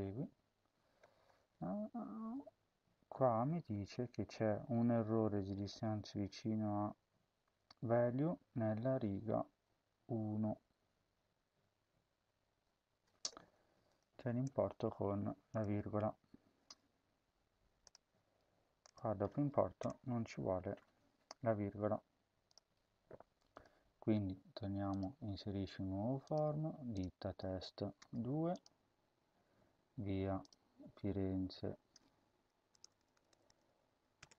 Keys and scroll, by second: 14.3 BackSpace, 19.7 BackSpace, 20.7 ctrl+s, 27.9 2, 32.6-34.3 typing.